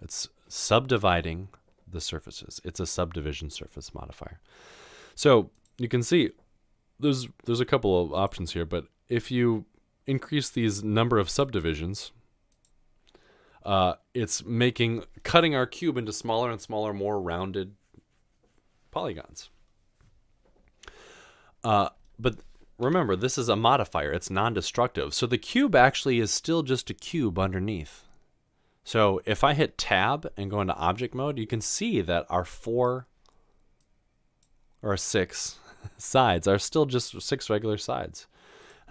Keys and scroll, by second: 30.5 Tab, 37.4 typing.